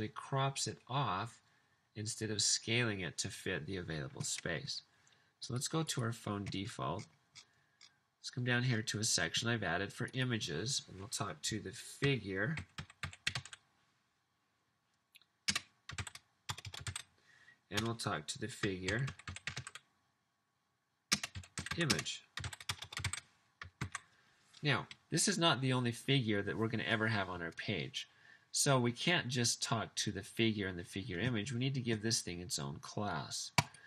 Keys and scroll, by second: 11.8-13.7 typing, 15.6-23.5 typing, 16.5 Return, 17.7 Return, 22.7 Return, 24.8 super+s.